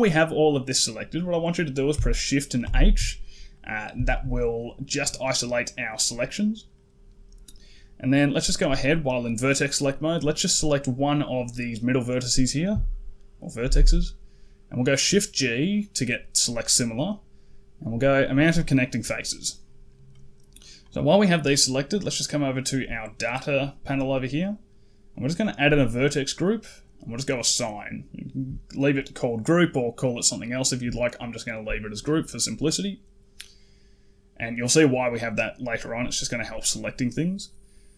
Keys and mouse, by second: 0.4 middle click, 2.5 shift+h, 3.4 middle click, 3.9 shift+middle click, 6.6 middle click, 13.4 shift+g, 22.8 click, 25.0 click, 26.9 click.